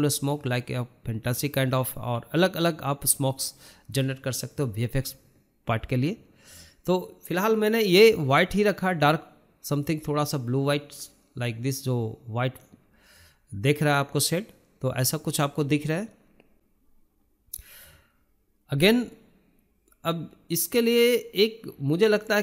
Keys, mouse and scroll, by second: 4.8-6.3 scroll up 1, 6.3-9.4 drag.